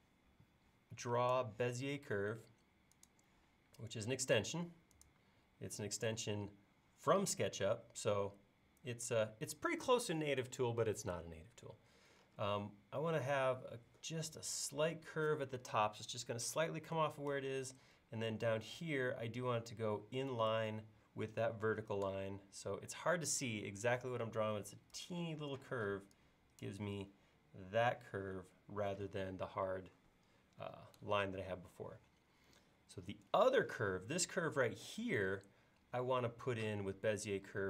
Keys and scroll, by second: 25.7 e.